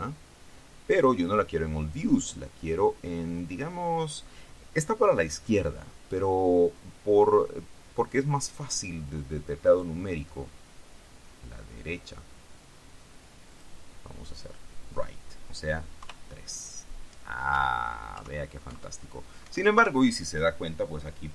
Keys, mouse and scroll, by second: 0.9-1.3 scroll down 1, 2.4 click, 9.8 click, 13.7 click, 16.1 KP_3, 17.7 KP_1, 18.9 KP_1, 19.6 KP_1, 19.9 KP_3.